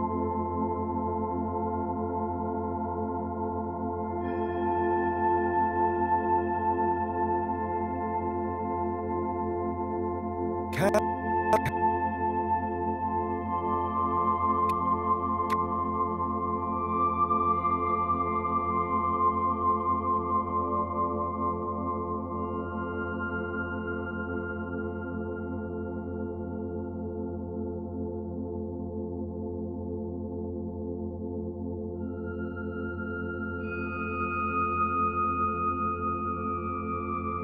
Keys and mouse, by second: 1.2 shift+click, 2.8-6.3 drag, 7.0 Right, 8.3 s, 8.5 x, 9.4 click, 9.9 space, 10.8 space, 11.9 space, 12.6 space, 13.4 click, 13.8 space, 14.6 space, 15.4 click, 18.2 click, 22.2 g, 23.4 Escape, 25.0 g, 30.1 Escape, 31.2-32.7 alt+drag, 32.9 click, 34.4 g, 35.1 click, 35.7 alt+click, 36.9 click.